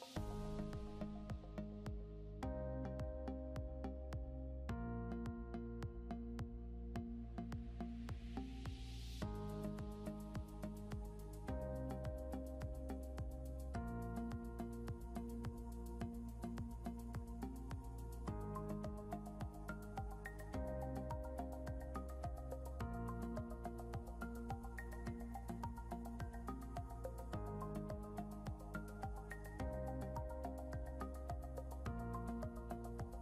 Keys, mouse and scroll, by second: 1.8-5.4 typing, 6.7-8.4 typing, 10.5-15.6 typing, 17.0-19.7 typing, 22.7-25.0 typing, 26.6-28.0 typing, 30.5 typing, 31.8-32.4 typing.